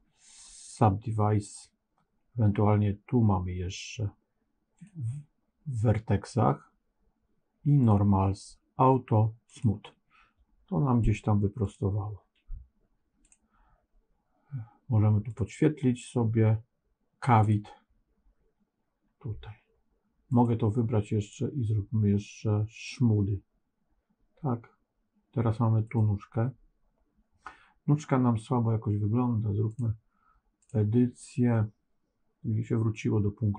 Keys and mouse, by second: 9.4 click, 13.2 click, 15.2-17.7 drag, 20.2 click, 21.3-22.9 right drag, 25.7 click, 29.6-30.6 drag.